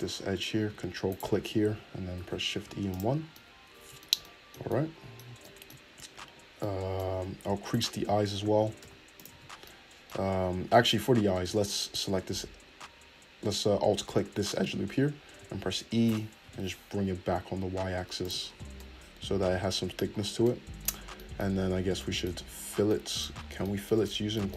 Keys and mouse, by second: 0.0 middle click, 0.6 ctrl+click, 1.2-2.3 middle drag, 2.1 shift+e, 3.0 Tab, 3.6-7.7 middle drag, 7.1 Tab, 7.7 alt+right click, 7.7 alt+middle click, 8.5 shift+e, 9.3 Tab, 11.3 Tab, 12.7-24.5 middle drag, 15.4 e, 18.6 Tab, 21.6 Tab.